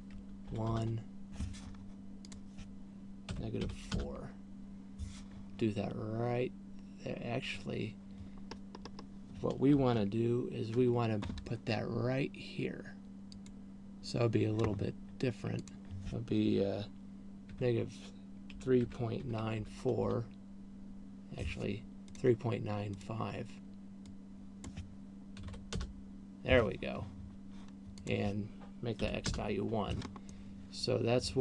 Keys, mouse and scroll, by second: 2.8 click, 9.0-9.5 scroll up 4, 10.3-11.0 ctrl+KP_4, 11.3 ctrl+KP_4, 14.0 click, 16.0 click, 22.5 click, 23.5 click, 28.5 click, 30.8 middle click.